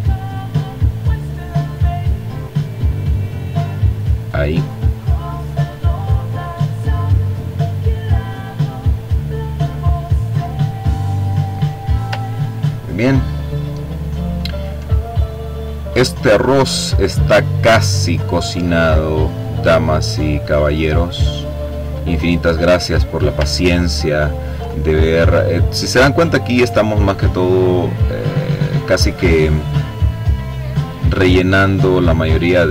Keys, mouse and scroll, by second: 0.2-2.9 drag, 3.4 click, 5.4-9.7 drag, 10.0-10.6 ctrl+scroll down 2, 10.8 ctrl+click, 11.5-12.4 ctrl+scroll up 3, 12.8 click, 14.4-15.9 drag, 16.0-17.4 drag, 17.6-18.9 drag, 19.2-20.6 drag, 19.2 right click, 21.2-21.8 ctrl+scroll up 2, 21.8 ctrl+click, 23.2-24.5 drag, 24.7-26.7 drag, 27.2-28.8 drag, 29.7-31.2 drag, 31.5-32.6 drag.